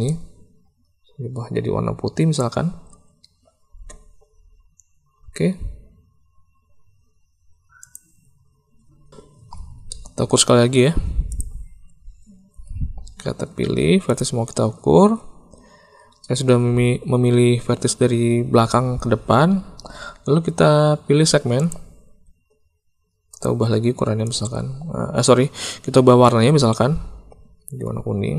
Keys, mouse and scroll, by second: 7.8 click, 9.8 shift+middle click, 14.0 shift+click, 21.5 click.